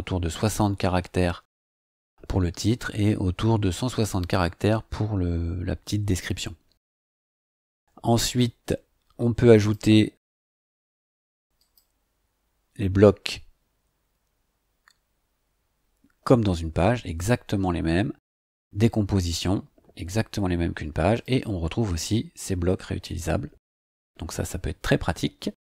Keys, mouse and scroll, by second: 9.6 click, 11.6 click, 16.4 scroll down 2, 17.3-18.0 scroll up 4, 18.4 click, 21.2 click.